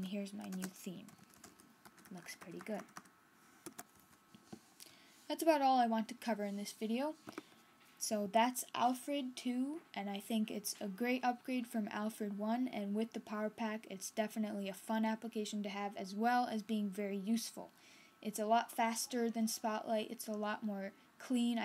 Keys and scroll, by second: 1.0-1.9 typing, 2.7 super+Right, 3.5 Escape, 3.8 super+Left.